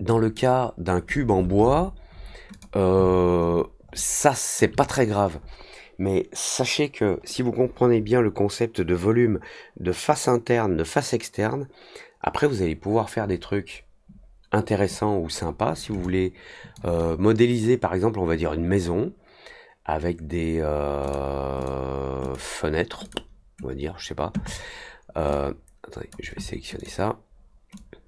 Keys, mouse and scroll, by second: 0.0 click, 2.5 click, 3.0 alt+middle click, 3.4 alt+middle click, 3.9-4.5 alt+middle drag, 16.0-16.7 alt+drag, 21.0 click, 21.5 click, 22.2 click, 23.0 click, 25.3 click, 26.7 click, 27.7-28.0 drag.